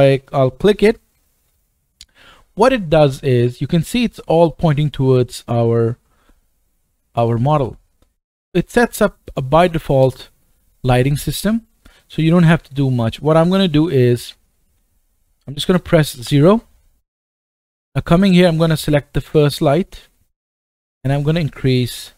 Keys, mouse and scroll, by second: 3.3 middle click, 4.0 scroll up 2, 4.0-12.3 middle drag, 16.2 KP_0, 19.3 click, 21.0-22.1 drag.